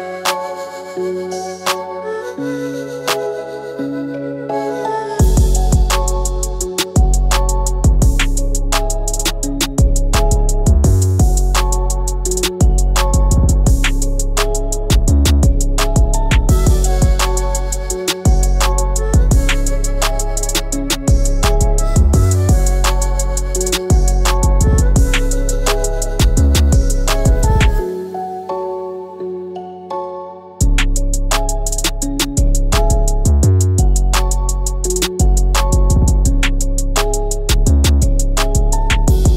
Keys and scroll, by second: 9.6 ctrl+z, 10.7 ctrl+c, 11.4 f, 17.0 ctrl+f, 19.3 ctrl+`, 34.9 KP_4, 35.2 KP_Decimal.